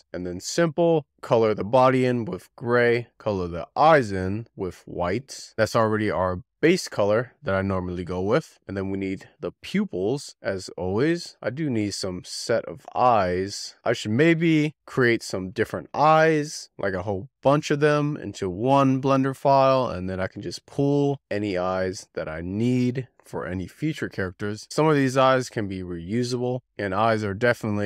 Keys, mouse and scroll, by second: 0.9 click, 1.3-2.9 shift+middle drag, 2.9 click, 3.5-3.8 scroll down 3, 4.1-4.7 scroll down 4, 4.9 click, 5.5-7.5 drag, 7.5-7.9 scroll up 6, 7.9-8.5 scroll down 4, 8.6-9.4 scroll down 3, 9.4 middle click, 10.1 click, 10.7-13.5 scroll up 27, 11.1 shift+middle click, 11.8 shift+middle click, 12.5 middle click, 13.5 KP_Decimal, 14.1-14.4 scroll up 1, 14.4 shift+middle click, 14.9 c, 16.0 click, 16.3 c, 17.7 3, 17.9 click, 18.5 c, 19.5-21.4 shift+middle drag, 21.4 c, 22.5 scroll down 4, 22.8 shift+middle click, 23.5-24.8 drag, 25.1-26.3 scroll up 2, 26.8 click, 27.3-27.6 scroll down 7.